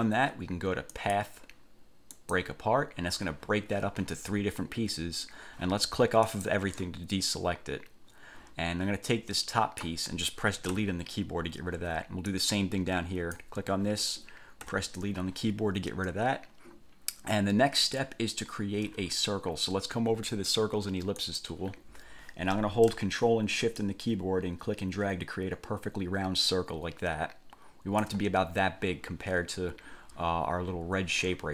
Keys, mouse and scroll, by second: 1.1 click, 2.3 click, 6.5 click, 9.3-10.2 drag, 11.0 Delete, 12.5-13.8 drag, 14.8 Delete, 21.4 click, 24.0-28.4 ctrl+shift+drag.